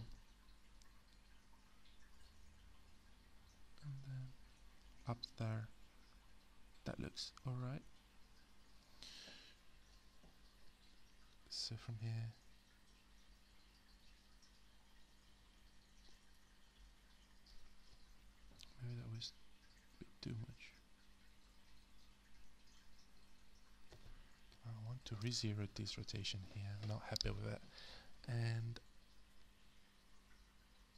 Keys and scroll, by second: 25.7 0, 25.8 Return.